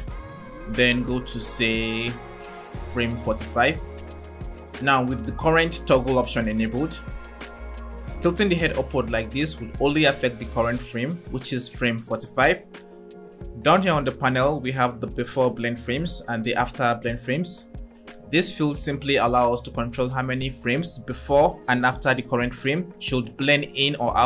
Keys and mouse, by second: 2.4 click, 6.2 click, 6.3 click, 8.1-8.4 drag, 10.6 click.